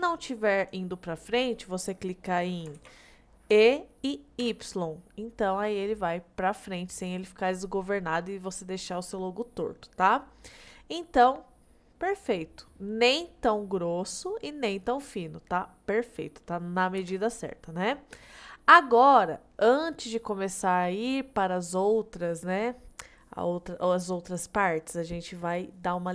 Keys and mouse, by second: 0.6 click, 2.8 ctrl+z, 3.6 e, 4.5 y, 7.0 click, 11.7 middle click, 12.2-14.1 middle drag, 14.6-15.6 middle drag, 17.0 KP_1, 18.6 middle click.